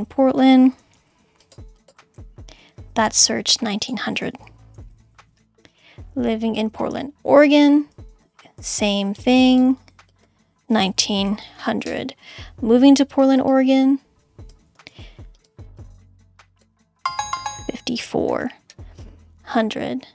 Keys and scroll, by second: 0.9 super+c, 2.1 super+v, 4.2-5.4 typing, 8.6 super+c, 9.8 super+v, 10.7-12.0 typing, 14.8 super+c, 15.9 super+v.